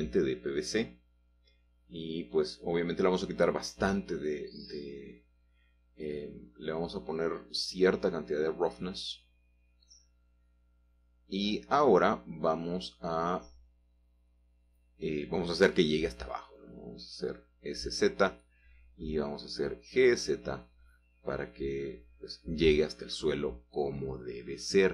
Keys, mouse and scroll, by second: 0.5-1.2 scroll down 4, 3.2 click, 5.4 typing, 5.7 Return, 7.3 click, 7.5 click, 7.9 middle click, 8.4 middle click, 9.4 middle click, 10.7-11.2 scroll up 2, 11.2-12.8 shift+middle drag, 12.9-13.6 scroll down 1, 13.6 middle click, 13.7 scroll down 1, 17.0 s, 17.7 z, 19.0 click, 19.7 g, 20.2 z, 23.1 shift+click, 23.3 shift+middle click, 24.5-24.9 scroll up 3.